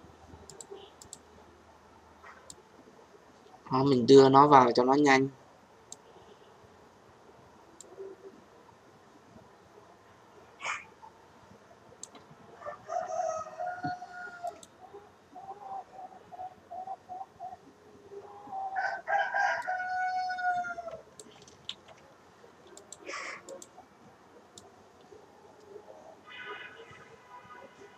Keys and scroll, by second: 21.6 ctrl+z.